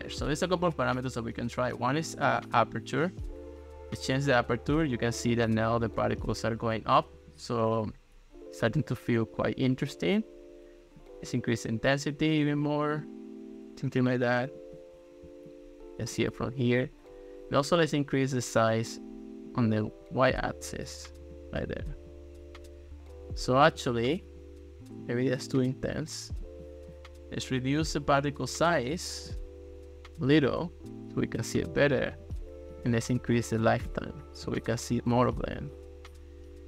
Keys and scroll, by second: 33.0 2, 33.7 Return.